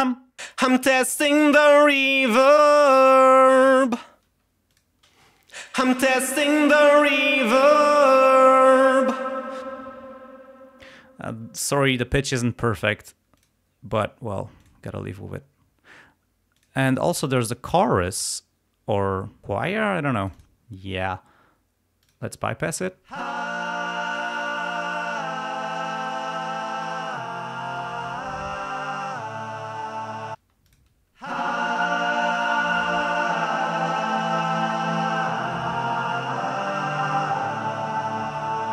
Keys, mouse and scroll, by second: 0.4 space, 4.3 space, 4.7 click, 5.1 space, 9.7 space, 13.4 click, 14.6 click, 15.0 scroll down 1, 16.6 click, 17.3 click, 18.2 click, 20.2 click, 22.0 click, 23.0 space, 30.4 space, 31.1 space.